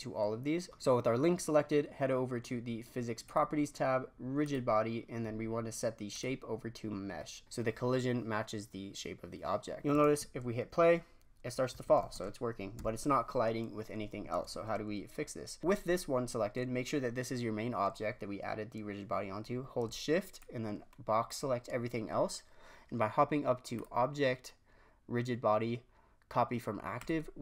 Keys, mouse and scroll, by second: 0.7-3.0 drag, 3.2 click, 4.4-7.8 drag, 10.0 shift+space, 12.0 shift+space, 12.7 shift+Left, 15.1 scroll down 2, 20.3-20.7 shift+drag, 23.7-26.8 drag.